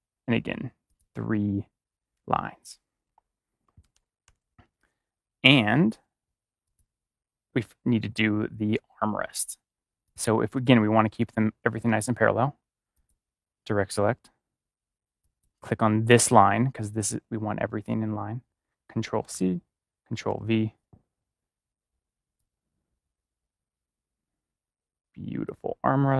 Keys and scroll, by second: 3.0 BackSpace, 3.9 ctrl+=, 18.8 ctrl+=, 19.2 ctrl+c, 20.2 ctrl+v.